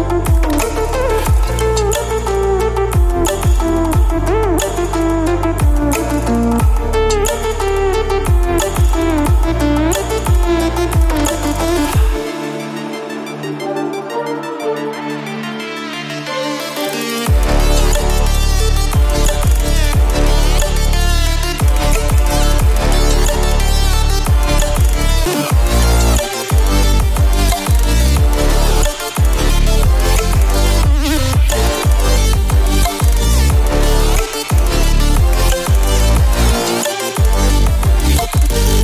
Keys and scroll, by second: 28.0 ctrl+space, 28.4 ctrl+space.